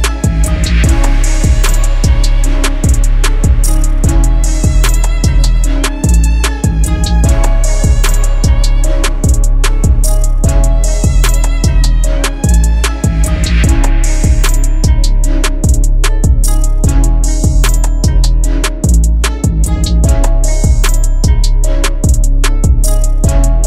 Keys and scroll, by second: 0.2 0, 1.1 5, 15.6 0, 16.0 1, 16.4 Return, 19.9 F3, 23.2 c.